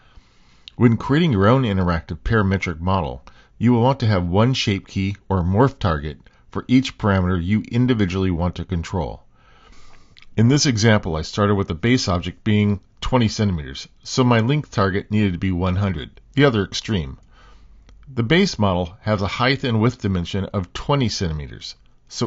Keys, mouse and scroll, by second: 0.5 x, 0.9-4.2 drag, 2.0 BackSpace, 3.1 BackSpace, 3.2 BackSpace, 4.8 click, 5.8 middle click, 6.9 middle click, 7.6 s, 8.0 click, 8.2 click, 8.9 x, 9.2 click, 9.3 click, 9.5 x, 9.7 click, 10.1 g, 10.4 middle click, 10.7 g, 11.0 middle click, 11.3 middle click, 11.5 shift+middle click, 11.8 Tab, 12.1 click, 12.4 g, 13.2 middle click, 13.2 g, 13.5 Tab, 13.8 click, 15.1 shift+d, 15.9 middle click, 16.4 super+z, 17.1 shift+d, 18.2 Tab, 18.4 middle click, 18.6 click, 19.0 g, 19.6 g, 20.0 middle click, 20.4 Tab.